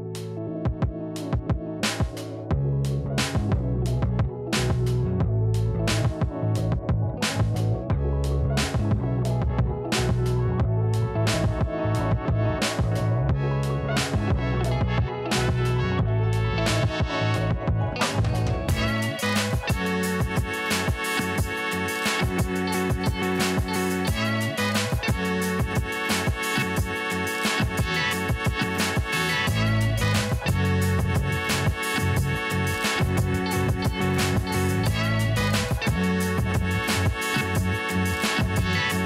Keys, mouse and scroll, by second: 5.8 alt+click, 7.6 alt+click, 13.9 alt+scroll down 1, 14.1-14.8 alt+scroll up 2, 14.9 alt+scroll down 1, 15.1 alt+scroll up 1, 15.7 alt+scroll up 1, 15.9 scroll down 1, 16.4 alt+scroll up 1, 17.0-17.9 scroll down 1, 17.9 click, 19.3 scroll up 1, 19.9-20.4 scroll down 2, 20.6 alt+scroll up 1, 21.6 click, 23.3-24.5 typing, 24.8 click, 26.7 ctrl+z, 28.0 click, 28.0 click, 28.7 alt+scroll down 1, 29.3 alt+scroll up 1, 29.5-30.0 scroll down 2, 30.2 click, 30.5 ctrl+s, 31.4-33.0 drag, 33.2 click, 34.7-36.0 scroll down 1, 36.0-38.0 drag.